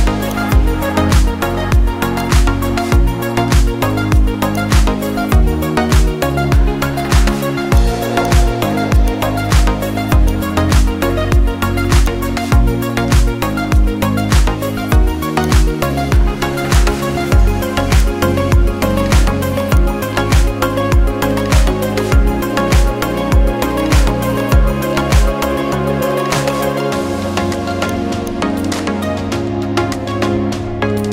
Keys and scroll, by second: 19.2 ctrl+shift+t, 27.0 Left.